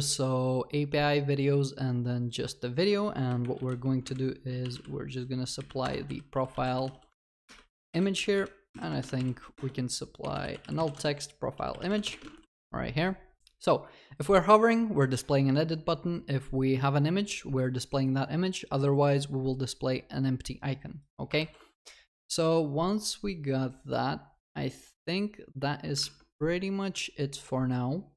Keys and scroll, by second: 5.9 Return, 7.4 Escape, 9.5 Escape, 9.5 Return, 12.4 ctrl+s, 21.4 ctrl+s.